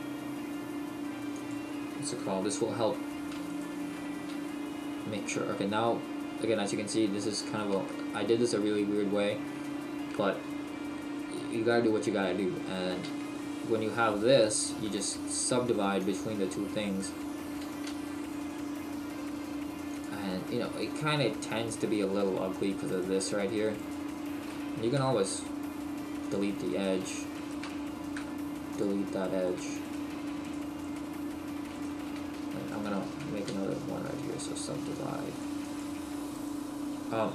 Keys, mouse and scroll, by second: 1.5 click, 3.5 shift+right click, 4.3 w, 7.9 shift+middle click, 16.9 right click, 17.9 g, 20.1 click, 22.9 right click, 23.8 shift+right click, 25.0 Delete, 27.0 right click, 27.4 shift+right click, 28.1 Delete, 29.9 shift+right click, 31.7 right click, 32.7 shift+right click, 33.5 w, 36.3 right click.